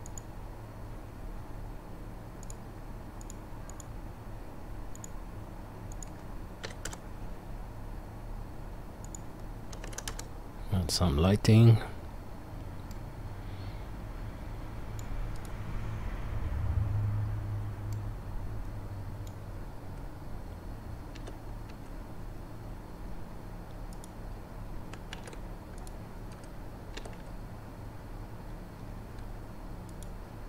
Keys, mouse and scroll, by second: 0.5-2.5 drag, 0.5-4.5 right drag, 3.3-4.5 drag, 3.3-5.0 middle drag, 5.0-5.9 right drag, 5.9-15.5 middle drag, 11.2-13.7 drag, 11.2-13.7 right drag, 15.5-30.4 right drag, 21.1 g, 25.2 ctrl+z, 25.8 click, 27.0 g.